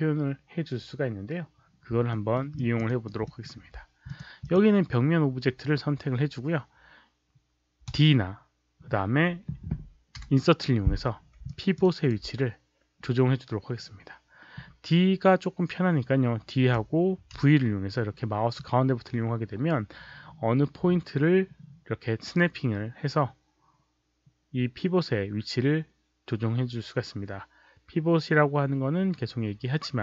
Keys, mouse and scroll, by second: 2.0 alt+middle click, 2.5 alt+click, 2.8 alt+right click, 3.2 alt+middle click, 4.0 click, 4.3 click, 7.8 d, 10.1 Insert, 11.5 alt+click, 11.7 alt+right click, 16.7 d, 17.3 v, 18.5-30.0 middle drag.